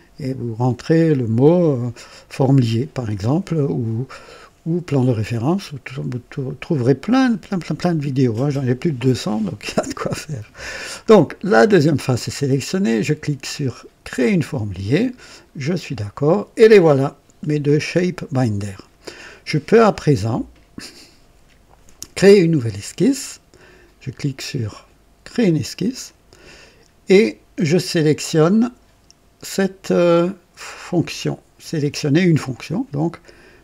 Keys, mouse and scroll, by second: 14.1 click, 15.5 click, 25.2 click.